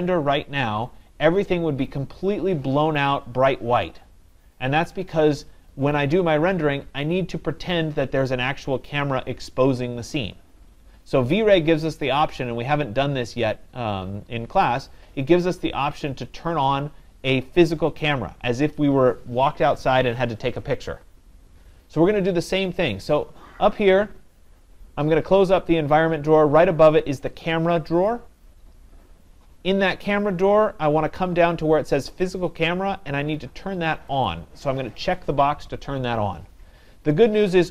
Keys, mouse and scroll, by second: 24.4-33.2 drag, 34.3-37.7 drag.